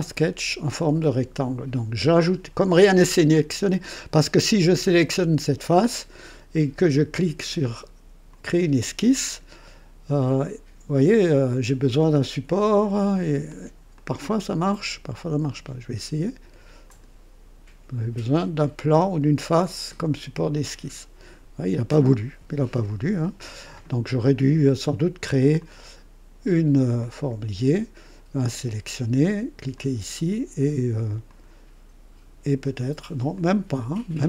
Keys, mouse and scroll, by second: 4.6 click, 8.3 click, 12.8 click, 13.5 click, 13.9-14.6 drag, 15.1 click, 16.8 click, 20.6 click, 22.7-24.4 drag, 25.6 click, 27.0 click, 28.4 click, 29.7 click, 31.3 click, 33.3 click.